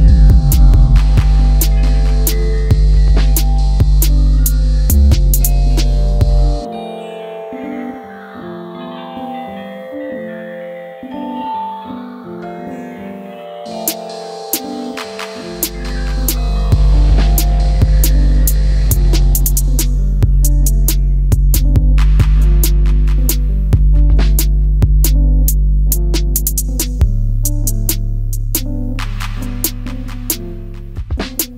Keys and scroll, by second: 5.7 m, 8.5 shift+space, 11.8 space, 15.7 alt+x, 16.9 shift+x, 18.7 shift+z, 26.0 space, 29.7 m, 31.1 q.